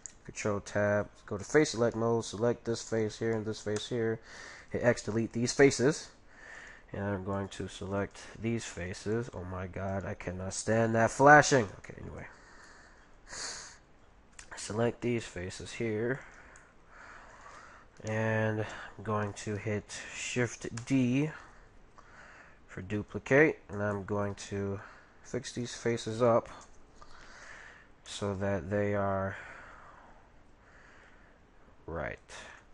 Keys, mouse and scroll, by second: 0.1 ctrl+t, 1.5-4.8 right drag, 2.0-4.5 middle drag, 2.4 z, 3.8 x, 6.5 x, 6.5 middle click, 6.5-12.5 right drag, 8.2 ctrl+z, 11.5 ctrl+z, 11.9 middle click, 12.7 middle click, 13.0 middle click, 13.2 middle click, 13.6 middle click, 15.0-19.0 right drag, 16.6-21.2 middle drag, 21.4 middle click, 23.4-26.2 shift+middle drag, 25.6-27.3 right drag, 28.1 g.